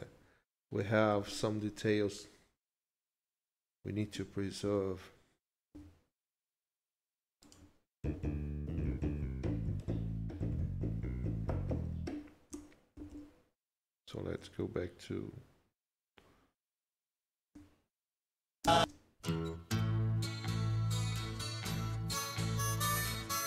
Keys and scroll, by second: 1.1 ctrl+s, 4.1 Home, 4.6 Right, 5.7 ctrl+s, 12.9 ctrl+shift+b, 18.7 ctrl+shift+space.